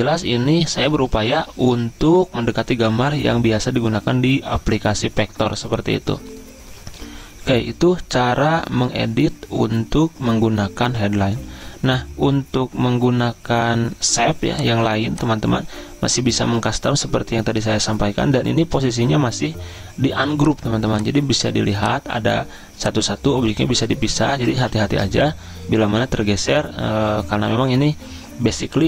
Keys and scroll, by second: 16.6 ctrl+z, 25.1 ctrl+z.